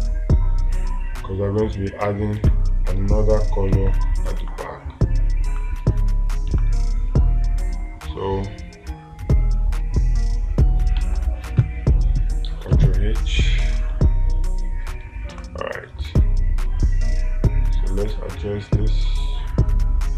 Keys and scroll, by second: 2.8 space, 11.4 ctrl+z, 15.8 space.